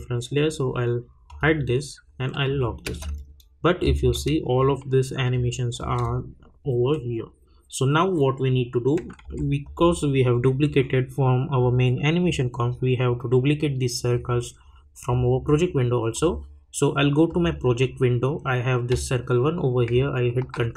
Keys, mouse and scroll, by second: 2.8 space, 5.3-8.1 drag, 9.2 =, 9.6 click, 16.1 click, 20.4 ctrl+d.